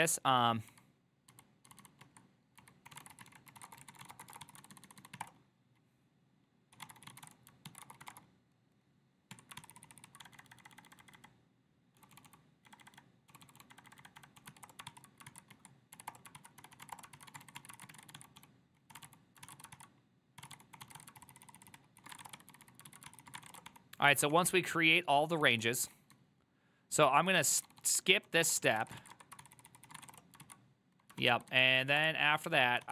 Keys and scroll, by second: 0.0-5.3 typing, 5.3 Return, 6.6-8.6 typing, 9.4 Tab, 9.7 ctrl+c, 9.8 ctrl+c, 9.9 ctrl+c, 10.1 ctrl+c, 10.3-10.7 typing, 11.8-15.0 typing, 15.4 ctrl+c, 16.0-24.0 typing, 16.2 Return, 24.4 ctrl+d, 25.2-32.9 typing, 32.1 Return.